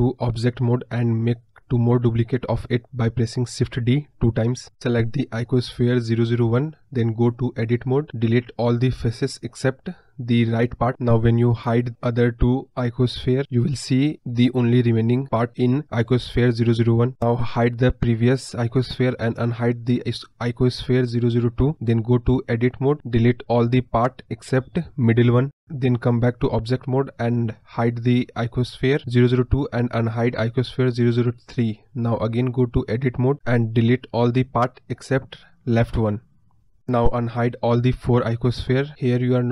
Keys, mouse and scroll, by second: 4.8 click, 7.6-11.7 drag, 12.1 click, 13.7 Tab, 16.5 click, 16.9 click, 20.9 click, 23.0 click, 24.1-27.9 shift+drag, 28.2 click, 28.8 click, 31.6 shift+click, 36.2 click, 36.8 click, 38.5 click, 38.8 click.